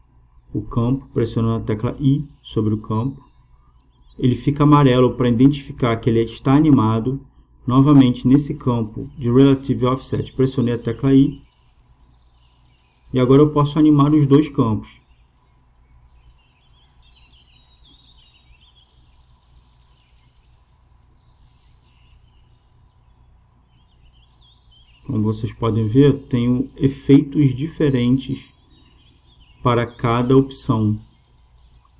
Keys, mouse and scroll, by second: 5.9-7.9 drag, 10.2 i, 19.0-20.9 drag, 23.4-25.1 drag, 27.5-29.3 drag, 29.9-31.9 drag.